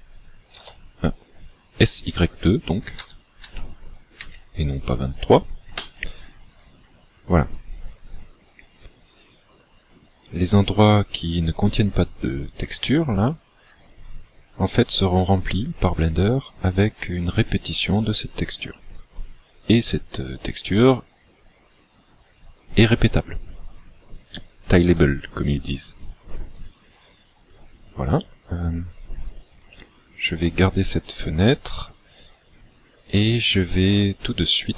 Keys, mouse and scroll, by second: 3.0 s.